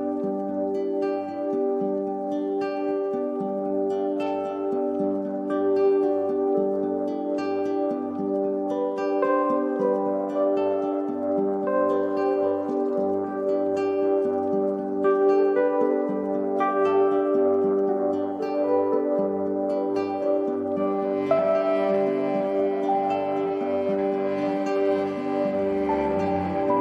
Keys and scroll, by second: 5.6 shift+Down, 7.3 shift+Down, 7.6 shift+Up, 10.3 i.